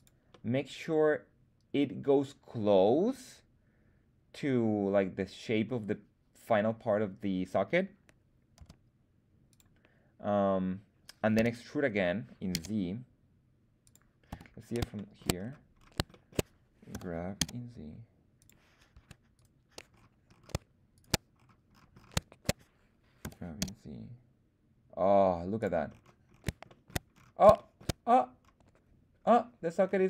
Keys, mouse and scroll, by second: 0.2-5.6 middle drag, 8.5 s, 9.4 click, 11.3 e, 12.4 z, 13.8 click, 14.2 KP_1, 14.9 shift+middle click, 15.3-15.6 scroll down 1, 15.7-16.0 scroll up 2, 16.0 shift+middle click, 16.8 g, 17.3 z, 18.3 click, 18.8 Tab, 19.2 right click, 19.8-20.2 scroll down 1, 20.4-20.9 scroll down 1, 20.9 shift+right click, 21.3-21.6 scroll down 1, 21.6-22.3 scroll up 4, 23.1 g, 23.5 z, 25.5 click, 25.8-26.6 scroll down 4, 26.6 shift+middle drag, 27.0-27.5 scroll up 2, 27.5 shift+middle click, 28.0-29.4 scroll up 2, 29.7-30.0 scroll down 4.